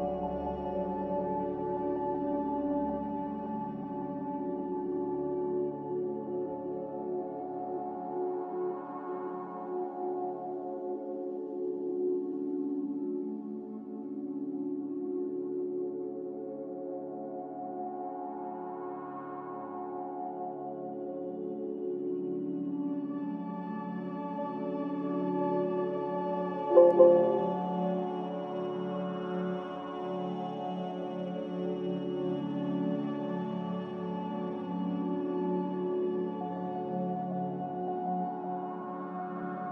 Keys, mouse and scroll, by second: 4.1 a, 5.6 Delete, 6.4 z, 8.4-9.2 typing, 12.1 Return, 15.5-16.4 typing, 22.8-26.0 typing, 28.4-29.8 typing, 32.2 x, 34.6 z, 37.2 z, 37.4 z, 38.4-39.3 typing, 39.3 Return.